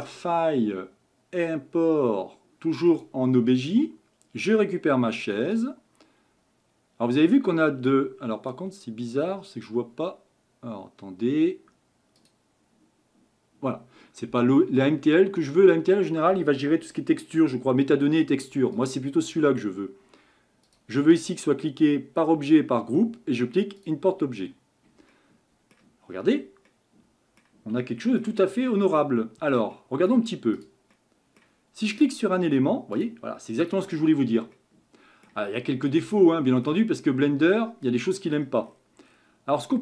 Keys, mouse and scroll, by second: 0.0-3.2 drag, 25.1-26.1 middle drag, 26.1 scroll up 7, 26.7-28.5 middle drag, 28.5 scroll up 5, 28.9-29.6 middle drag, 29.6 shift+scroll up 1, 29.7-30.6 shift+middle drag, 30.6 click, 30.9-31.5 middle drag, 31.5-32.0 scroll up 1, 32.0 click, 33.0 click, 33.6 click, 34.2 scroll down 1, 34.6-35.6 middle drag, 35.6 scroll up 5, 36.1-37.0 shift+middle drag, 37.0-37.4 scroll up 2, 37.4 middle click, 38.4-39.8 scroll down 15.